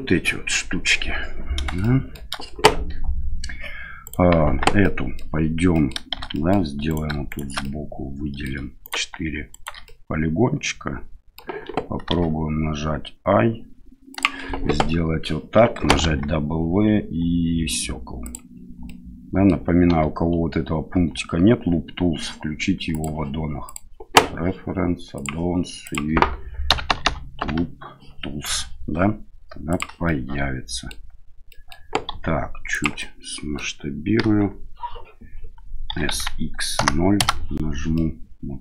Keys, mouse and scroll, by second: 1.8-2.1 shift+middle drag, 4.0 right click, 4.4 Tab, 4.8 middle click, 5.7 middle click, 6.1 shift+z, 6.3 middle click, 6.9 right click, 7.3 shift+right click, 7.6 middle click, 8.8 right click, 9.5 shift+right click, 9.8-11.4 middle drag, 12.1 i, 16.0 w, 18.9 middle click, 19.8 w, 22.9-23.9 drag, 30.0 middle click, 31.5 middle click, 32.1 s, 33.1 middle click, 34.2 KP_1, 35.9 s, 37.9 middle click.